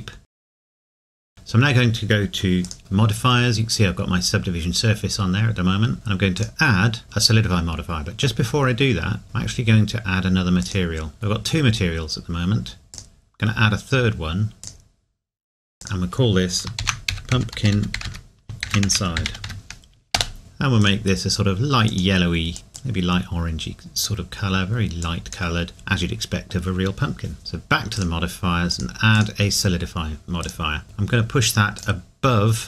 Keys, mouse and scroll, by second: 0.9 space, 1.2 middle click, 2.6 click, 6.3 click, 10.6 click, 11.1 scroll up 1, 18.5 typing, 27.9 click, 31.8 click.